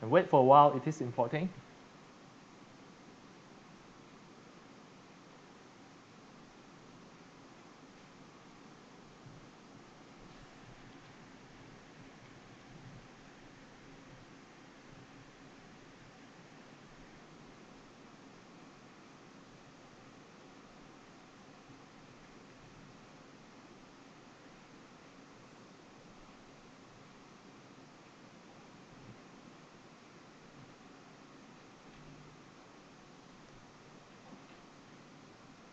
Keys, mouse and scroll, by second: 5.6 click.